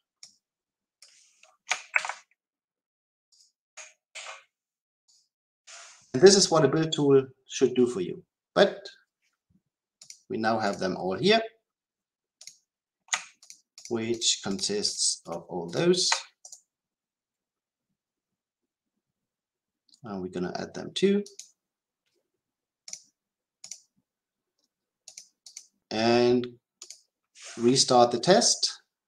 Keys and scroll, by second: 4.1 ctrl+v, 21.3 ctrl+alt+a, 26.8 shift+F10.